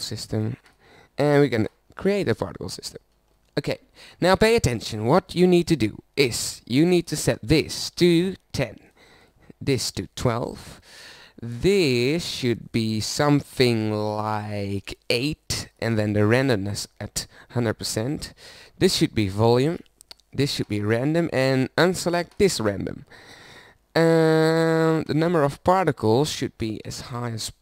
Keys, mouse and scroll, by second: 25.1-26.8 middle drag, 26.8 KP_0.